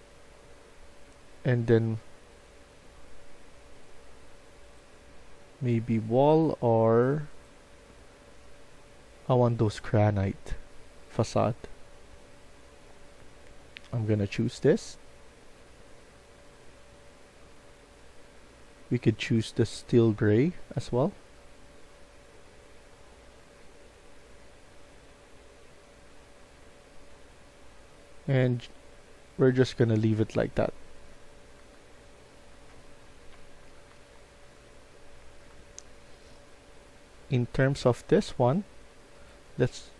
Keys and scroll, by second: 29.3-37.8 typing.